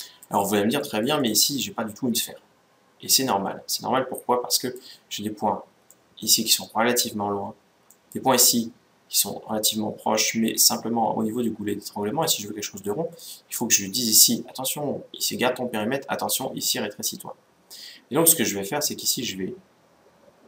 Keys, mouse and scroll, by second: 0.5-2.6 middle drag, 2.8 middle click, 5.6-7.3 middle drag, 7.6-9.4 middle drag, 12.0-14.6 middle drag.